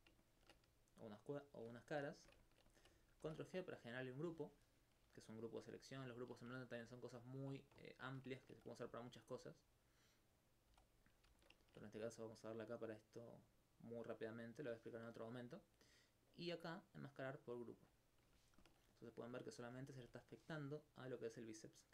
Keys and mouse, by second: 0.0 alt+click, 0.1 alt+click, 0.9 shift+right click, 1.4 shift+right click, 1.9 alt+click, 2.0 alt+click, 3.2 ctrl+g, 3.8-4.9 drag, 4.9 Tab, 5.0 z, 9.0 alt+click, 9.5 right click, 10.8 click, 12.0 right click, 15.0 right click, 16.3 click, 20.0 alt+click, 20.1 alt+click, 21.1-21.9 drag.